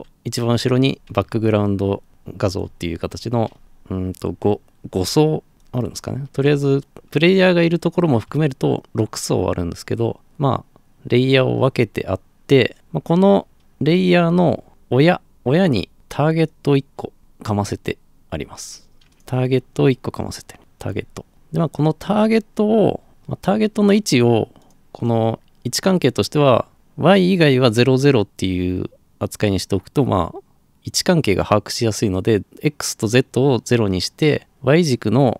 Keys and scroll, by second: 20.6 f.